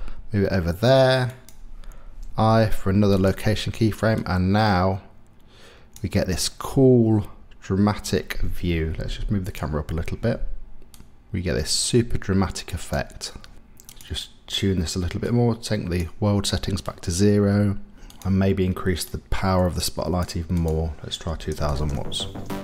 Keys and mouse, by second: 1.3 click, 2.3 i, 4.1-5.9 drag, 11.0-12.9 drag, 13.9 click, 14.0-15.3 middle drag, 15.3 click, 16.0-18.1 middle drag, 18.1 click, 18.2 middle click, 19.1-20.2 drag, 20.2 middle click, 20.6-22.3 drag, 21.7 KP_0.